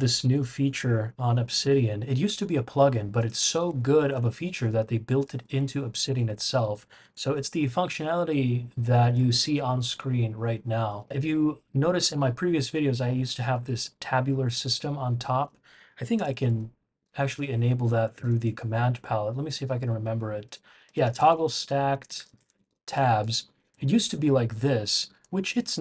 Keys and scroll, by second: 0.0-0.6 typing, 3.4-5.5 typing, 3.6 Escape, 7.3 shift+super+[, 9.0 shift+super+[, 9.9 shift+super+], 10.9 shift+super+], 16.1 super+,, 17.2 Escape, 18.1 super+p, 20.6-23.3 typing.